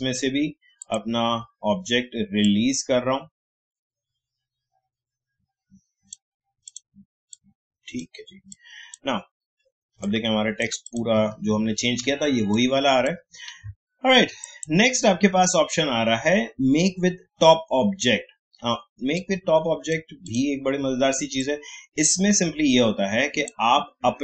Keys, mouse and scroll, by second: 11.5-12.0 alt+scroll up 1, 12.4 space, 12.5 click, 12.9 space, 14.4 click, 19.1-24.2 drag.